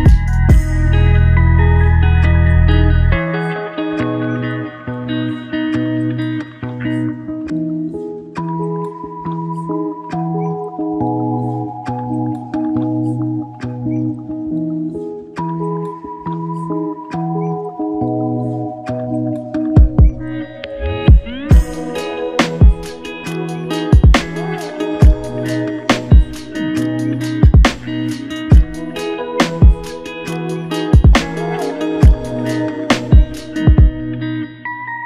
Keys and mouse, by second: 2.7 double click, 11.9 shift+click, 14.3 double click, 15.1 shift+click, 15.4 shift+double click, 15.6 shift+click, 16.5 alt+shift+click, 17.1 alt+click, 19.9 double click, 24.1 shift+click, 25.4 double click, 26.5 alt+click, 31.3 shift+click, 31.5 shift+double click, 32.5 ctrl+alt+click, 33.3 alt+shift+click, 33.8 alt+click, 34.8 ctrl+alt+click.